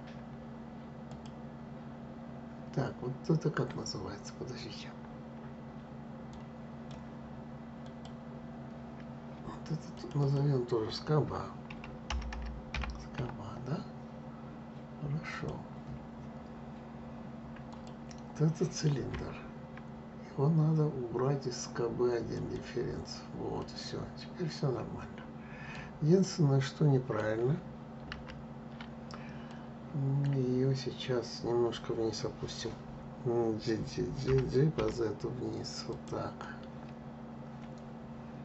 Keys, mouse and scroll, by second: 0.8-3.8 drag, 7.5 click, 9.6 click, 9.9-13.0 drag, 17.4 click, 22.0 click, 23.3-27.9 middle drag, 27.9 ctrl+z, 29.2-32.2 middle drag, 34.0 g, 36.1-38.4 middle drag.